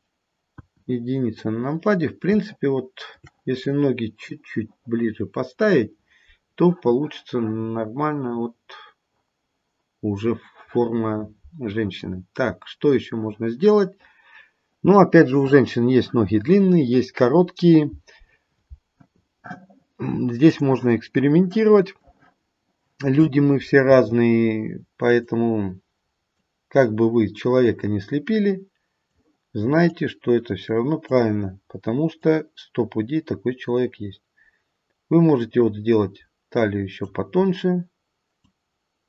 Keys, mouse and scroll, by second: 0.4 KP_1, 1.1-1.8 scroll down 1, 1.8-2.2 scroll up 1, 2.5 shift+middle click, 7.9-10.0 scroll up 1, 10.0-11.0 scroll down 1, 20.6 click, 23.9 f, 26.3 click, 29.9 click, 32.2 click, 37.6-38.4 scroll up 5, 38.4 click.